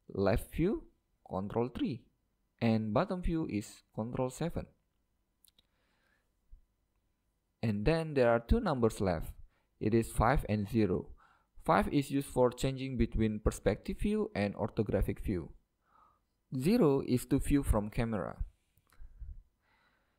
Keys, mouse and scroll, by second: 1.4 ctrl+KP_3, 3.7 ctrl+KP_7, 6.2 KP_1, 8.0-9.9 middle drag, 11.6 KP_5, 14.4 KP_5, 15.0-15.8 KP_5, 17.5-19.6 middle drag, 18.6 KP_0.